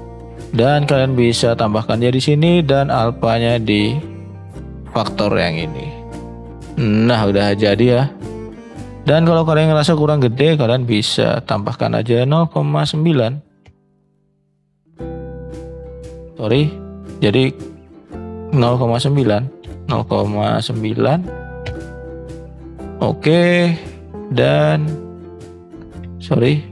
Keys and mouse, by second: 8.5-10.4 middle drag, 18.3-23.5 drag, 23.7 shift+middle click.